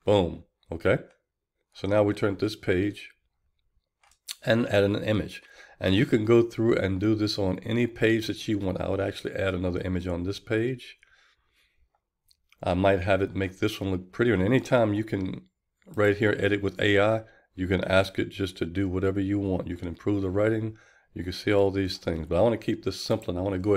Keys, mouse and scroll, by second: 0.1-2.4 drag, 2.5-4.5 drag, 5.6 click, 6.5-8.4 drag, 8.5-23.7 drag.